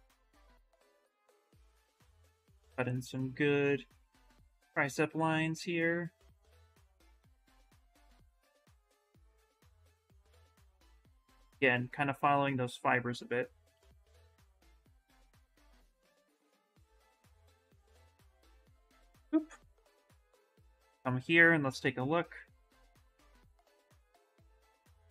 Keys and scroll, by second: 10.9 ctrl+z, 14.0-14.9 typing, 15.9 alt+Tab, 17.6 alt+Tab, 18.0 alt+Tab, 18.4 alt+Tab.